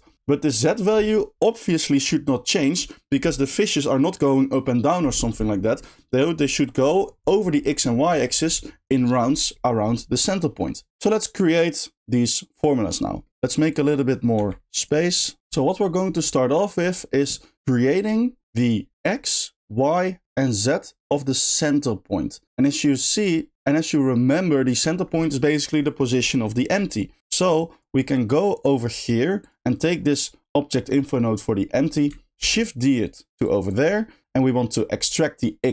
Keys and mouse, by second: 13.8 click, 14.4 g, 27.6 click, 28.2 middle click, 29.4 click, 33.4 shift+click, 33.7 shift+click, 34.0 shift+middle click, 34.6 shift+middle click.